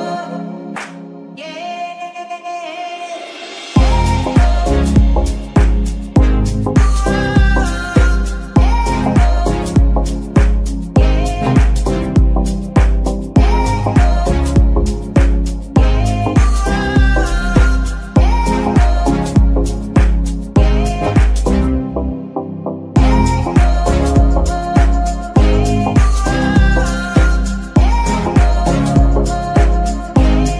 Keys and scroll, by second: 10.4 shift+KP_3, 11.3 g, 13.3 s, 15.1 shift+g, 21.1 KP_1, 24.2 shift+g, 27.2 g, 27.3 y, 27.6 x, 29.8 KP_7.